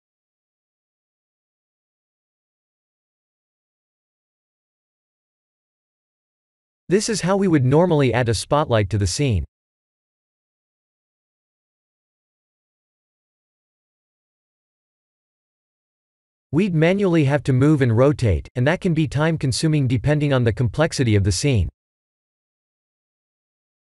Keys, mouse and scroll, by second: 2.2 click, 3.2 click, 7.4 shift+a, 13.4-14.8 middle drag, 15.3 click, 15.7-16.1 scroll down 4, 16.3 g, 18.2 KP_1, 18.4 KP_1, 19.6 g, 20.8 KP_1, 21.2 KP_7, 22.4 g.